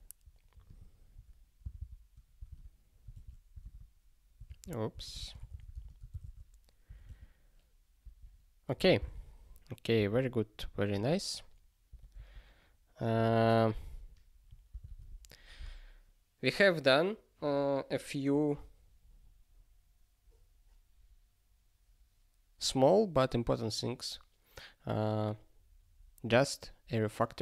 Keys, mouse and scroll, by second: 0.6 click, 0.8 click, 1.6 Return, 1.8 Return, 3.0 alt+q, 3.6 alt+;, 4.4 ctrl+/, 4.9 ;, 5.2 space, 5.5 ctrl+n, 5.7 alt+q, 6.2 ctrl+s, 8.0 ctrl+s, 10.9 ctrl+n, 11.9 ctrl+s, 12.1 super+b.